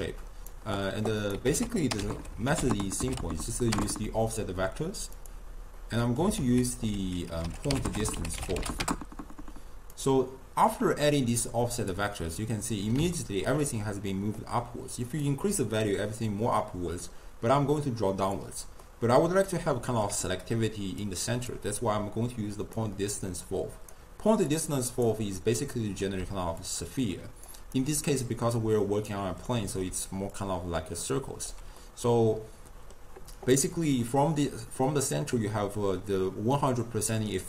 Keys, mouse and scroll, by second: 0.1 click, 0.6 d, 1.3 click, 1.5 ctrl+a, 2.2 f, 5.8-6.4 middle drag, 6.4 ctrl+a, 10.7 click, 12.4 scroll up 1, 12.5-15.3 middle drag, 15.3-18.3 drag, 18.9-20.2 middle drag, 20.2-20.9 d, 21.1-21.6 drag, 21.6 d, 22.8 click, 24.6 click, 25.7-26.3 middle drag, 26.3 d, 26.7 click, 27.5 d, 27.9-29.2 right drag, 29.2 d, 29.6-29.9 middle drag, 29.9 d, 30.4-31.5 drag, 31.5 d, 31.9-34.9 middle drag.